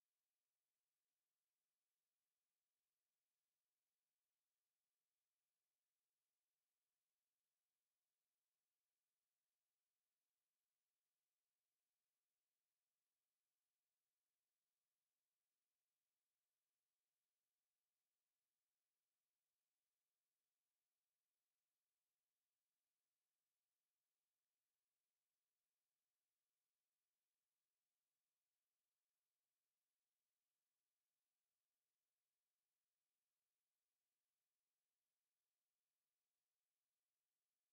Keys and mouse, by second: 0.0 alt+right click, 0.9 alt+middle click, 1.3 alt+click, 1.9 alt+middle click, 2.9 alt+right click, 3.3 alt+middle click, 3.9 click, 4.3 alt+middle click, 4.7 alt+right click, 6.5 click, 7.3 shift+click, 7.8 shift+right click, 10.4 ctrl+click, 13.4 r, 14.4 click, 19.1 alt+right click, 19.6 alt+click, 21.9 alt+right click, 22.5 click, 22.9 right click, 24.0 click, 24.3 shift+right click, 26.4 click, 30.1 right click, 31.0 click, 32.0 shift+click, 33.1 shift+click, 34.3 shift+click, 35.7 r, 36.5 click.